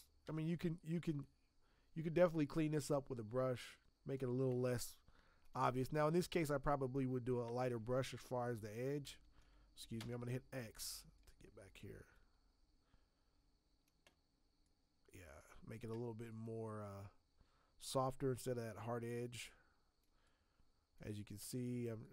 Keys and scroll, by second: 0.2 b, 9.9 x, 21.3 x.